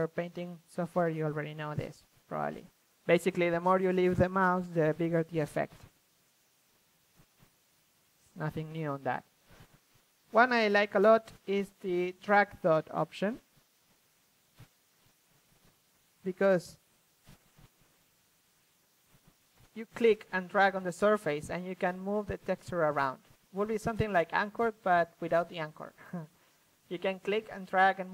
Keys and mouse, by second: 1.9-3.0 middle drag, 3.0 ctrl+z, 5.8-7.1 drag, 7.4-8.8 drag, 9.2 ctrl+z, 9.6-11.2 drag, 13.8 middle click, 14.1-15.6 drag, 16.2 ctrl+z, 16.4 f, 17.8-18.5 drag, 19.1-19.5 middle drag, 19.5 ctrl+z, 19.9 shift+f, 20.2-22.5 drag.